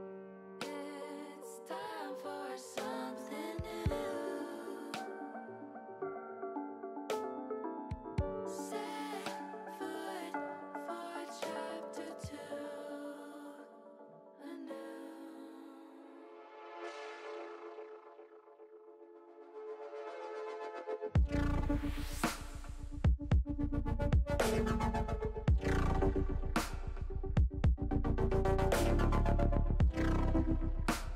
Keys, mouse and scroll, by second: 1.9 ctrl+z, 2.2 ctrl+z, 2.4 ctrl+z, 3.8 click, 8.9 click, 9.7-11.1 middle drag, 12.3 shift+middle click, 13.2 middle click, 13.7 middle click, 14.2 middle click, 14.3 middle click, 15.1 middle click, 15.7 ctrl+z, 16.0 ctrl+z, 16.1 ctrl+z, 16.3 ctrl+z, 17.1 middle click, 20.8 l, 24.6-26.6 drag, 29.0 click, 30.0 click.